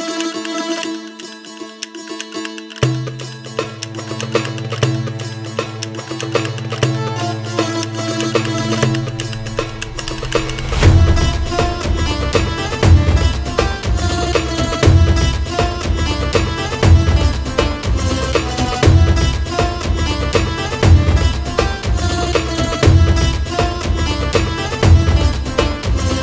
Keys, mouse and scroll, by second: 2.6 ctrl+4, 3.4-8.0 shift+middle drag, 8.0 click, 9.2-14.8 drag, 16.1-19.3 drag, 20.5-23.6 drag.